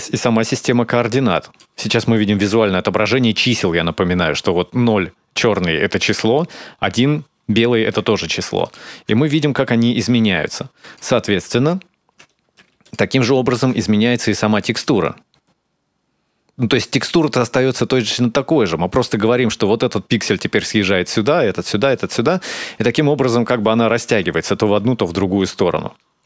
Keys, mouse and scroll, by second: 8.4 ctrl+shift+click, 9.1 shift+click, 12.1 middle click, 12.6 ctrl+shift+click, 14.3 shift+click, 14.8 shift+click, 15.1 ctrl+shift+click, 24.2 shift+click.